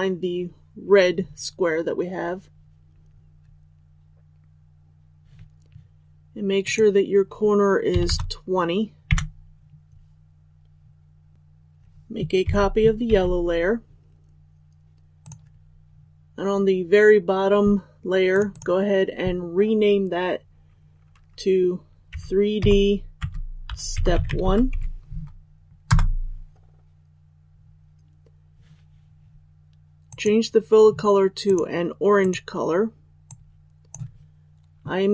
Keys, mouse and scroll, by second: 6.6 click, 12.4 ctrl+c, 13.0 ctrl+v, 15.2 click, 23.1 space, 25.8 Return, 30.0-33.2 drag.